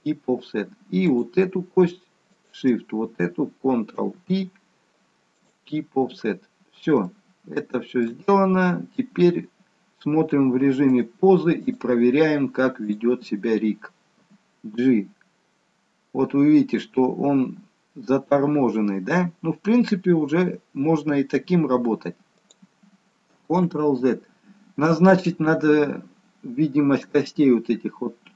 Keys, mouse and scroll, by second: 1.0 click, 2.2 shift+click, 3.9 ctrl+p, 6.1-6.9 scroll down 2, 7.0 shift+middle click, 8.5-9.1 scroll up 2, 10.8 click, 12.8 click, 14.2 g, 23.9 ctrl+z.